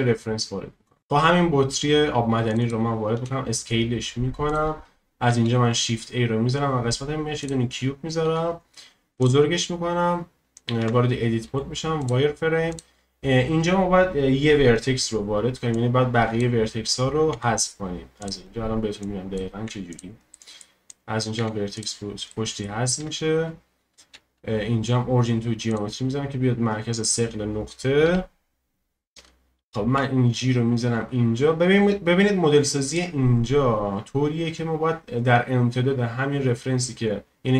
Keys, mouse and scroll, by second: 3.1 s, 3.2 click, 3.8-5.3 drag, 3.8 s, 5.3 shift+a, 8.2 s, 10.8 Tab, 11.4 z, 12.7-15.7 drag, 17.3 x, 19.0 click, 19.6 x, 20.3 middle click, 20.9 click, 21.4 x, 22.3 middle click, 23.0 Tab, 24.1 q, 28.0 KP_1, 29.9 g, 33.3-33.8 scroll up 2, 34.3-37.3 scroll down 1.